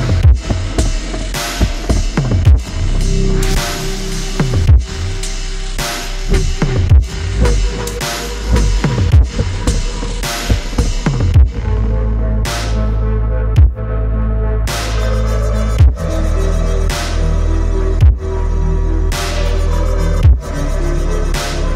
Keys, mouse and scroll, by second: 2.7 alt+scroll down 1, 4.3 alt+scroll down 1, 10.0 ctrl+click, 12.7 ctrl+shift+i, 21.3-21.7 typing.